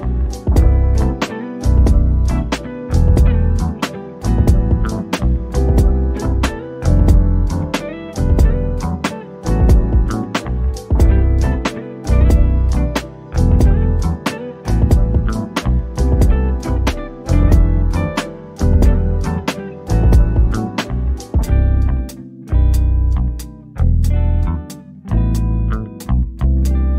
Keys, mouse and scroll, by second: 3.4 click, 6.5 middle click, 7.3-7.8 scroll up 1, 10.1 click, 10.1 click, 12.0 click, 16.0 click, 20.6 click, 23.7 click, 25.5 scroll up 1.